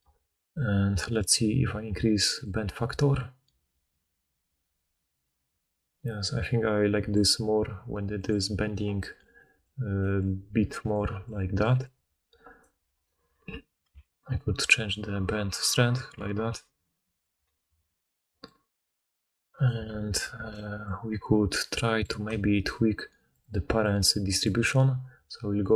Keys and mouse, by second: 10.5-12.7 typing, 15.8-17.3 shift+drag, 17.3 click, 19.6-20.2 drag, 20.3 alt+a, 21.0-23.4 drag, 23.4-25.7 middle drag.